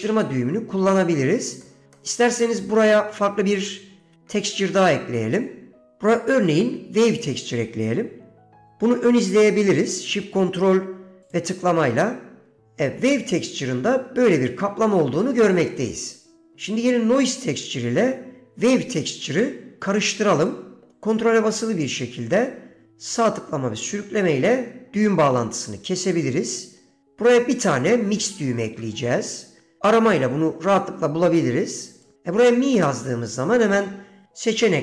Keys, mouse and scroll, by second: 1.8 middle click, 2.1 middle click, 4.6 shift+a, 11.4 ctrl+shift+click, 20.6 middle click, 21.0-25.6 ctrl+right drag, 26.3 middle click, 28.8 shift+a.